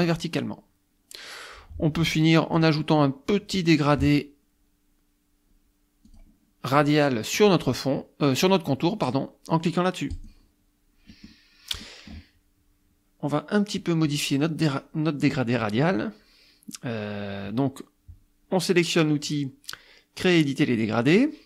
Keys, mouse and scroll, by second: 0.0 click, 2.6 click, 3.9 click, 6.1 click, 7.4 click, 10.1 click, 11.2 middle click, 11.2-11.5 scroll up 1, 11.9 middle click, 11.9-12.3 scroll up 1, 14.1 click, 15.6 click.